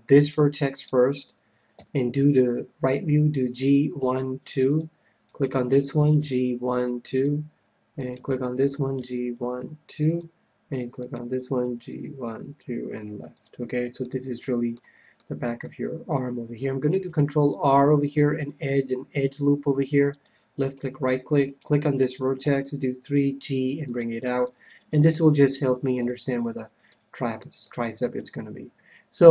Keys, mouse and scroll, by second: 0.6-2.4 right drag, 1.7 KP_3, 3.2 g, 4.7-6.4 drag, 5.3-7.0 right drag, 6.1 g, 6.7 g, 7.1-9.1 drag, 7.3 g, 8.1-9.9 right drag, 8.9 g, 10.1-11.9 drag, 11.0-12.8 right drag, 11.6 g, 13.4-15.0 drag, 14.0-16.8 middle drag, 16.8 ctrl+r, 20.6-23.3 right drag, 22.4 KP_3, 23.1 g, 23.9-25.4 drag, 24.4-25.9 middle drag, 25.9 a, 26.8-29.3 middle drag, 28.1 KP_1.